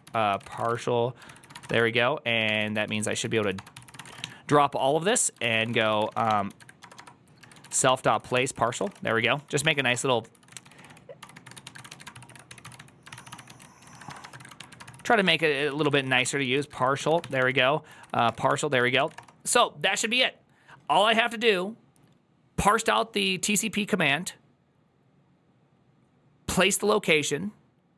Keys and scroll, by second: 0.0-19.4 typing.